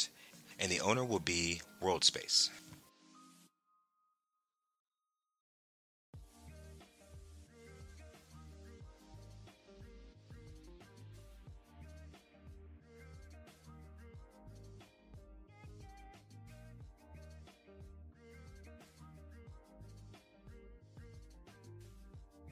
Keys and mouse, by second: 5.5 Tab, 8.0 alt+r, 10.6 click, 12.3 alt+r, 15.3 Tab, 18.8 click, 20.9-22.5 drag.